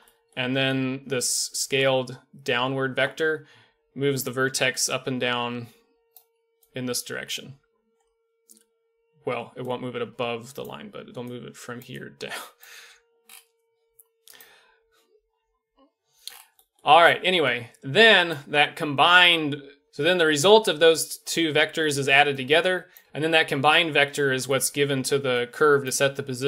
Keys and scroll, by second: 3.5-7.4 typing, 9.5-12.7 typing, 19.8 d.